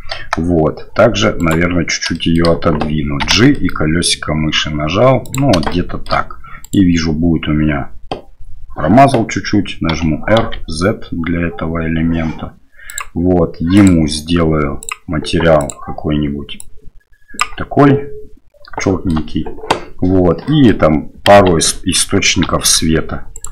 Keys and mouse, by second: 0.1 KP_0, 1.4 right click, 2.1 shift+middle drag, 3.2 g, 5.7 shift+middle drag, 6.6 right click, 9.9 r, 13.8-15.7 drag, 18.8 shift+middle drag, 20.4 middle click, 21.3 KP_1, 22.4 KP_7, 23.4-23.5 right drag.